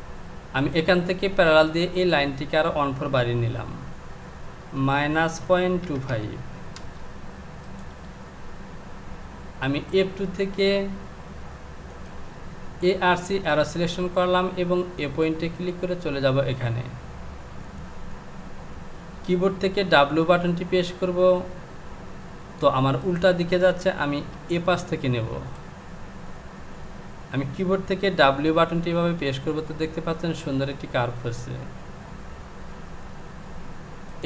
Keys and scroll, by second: 3.9 Down, 4.7 KP_Subtract, 5.4 KP_Decimal, 6.1 KP_5, 6.8 Return, 20.0 w, 28.3 w.